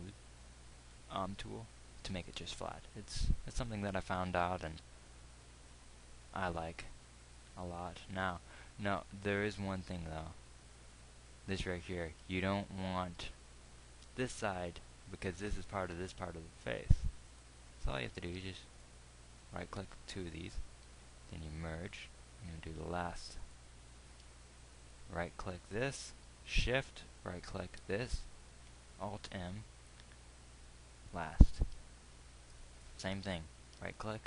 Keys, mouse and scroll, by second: 3.5 KP_1, 5.3 z, 10.3 Tab, 21.2 alt+m.